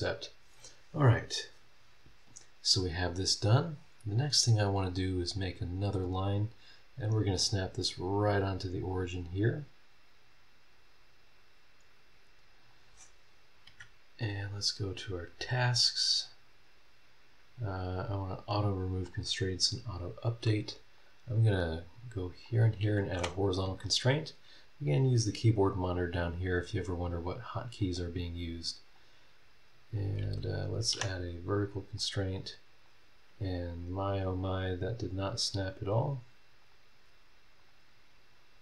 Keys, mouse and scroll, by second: 4.8 click, 5.1 scroll down 1, 5.6-6.2 scroll up 2, 8.7 click, 9.2 scroll down 2, 12.6 click, 13.6 Escape, 14.4 click, 16.1-16.7 scroll down 4, 17.4 scroll up 2, 18.4 click, 19.0 click, 20.0 scroll up 1, 21.0 click, 22.4 click, 23.1 h, 27.4 click, 28.9-30.1 drag, 30.5 click, 30.9 v, 32.0-33.0 drag, 34.3 click, 35.0 click, 35.8 click, 36.6 click, 37.6 click.